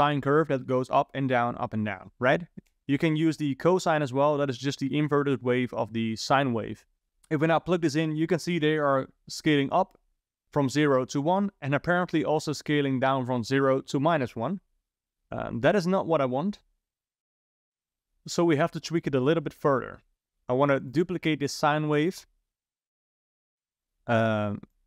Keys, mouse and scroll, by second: 7.8 click, 8.8 click, 20.2 click, 20.9 click, 21.3 shift+d, 22.7 click, 23.9 click, 24.7 click.